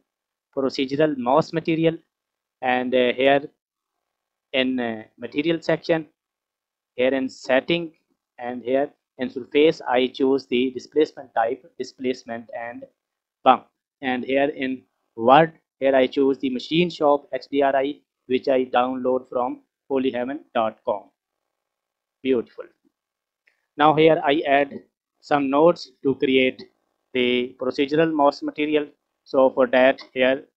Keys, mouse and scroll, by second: 5.8-9.9 scroll down 14, 9.9-13.4 drag, 14.9 click, 21.8 click, 22.6 scroll up 3, 23.0-23.5 middle drag, 28.9 scroll down 4, 29.2 middle click.